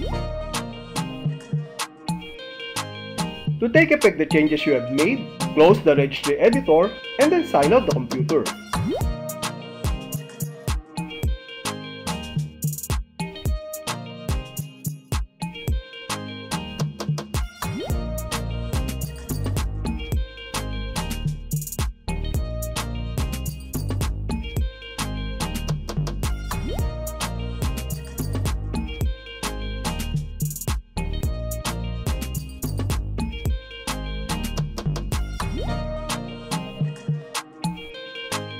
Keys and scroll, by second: 2.1 Return, 5.5 shift+t, 8.7 BackSpace, 9.9 BackSpace, 10.3 Left, 11.0 Left, 12.2 Left, 13.4 Left, 14.5 Left, 15.6 Left, 16.7 Left, 17.8 Left, 18.9 Left, 20.0 Left, 22.0 alt+f, 27.0 Return, 32.5 space.